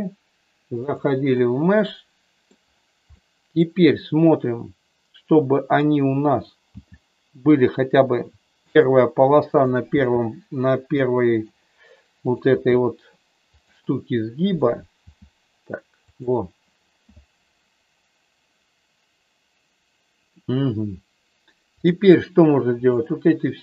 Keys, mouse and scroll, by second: 0.8 click, 0.8 e, 1.3-2.4 middle drag, 3.1 middle click, 6.8 g, 8.8 click, 9.6 click, 9.9 g, 11.3 click, 12.4 g, 14.4 click, 15.0 g, 16.0 click, 21.8 click.